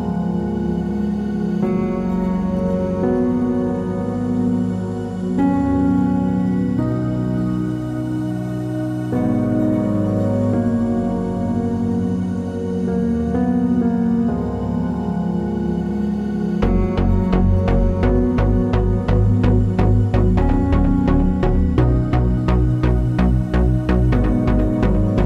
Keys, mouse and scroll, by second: 0.5 shift+a, 3.7 KP_Enter, 4.3 s, 4.8-6.4 drag, 6.4 s, 7.4 click, 7.6 g, 8.4 click, 8.6 s, 9.7 click, 10.2 g, 11.4 click, 11.5 s, 12.8 click, 13.5 scroll up 1, 13.9 z, 15.9 click, 16.0-21.1 middle drag, 17.4 ctrl+r, 21.1-22.5 drag, 22.5-24.9 middle drag, 24.9 alt+click.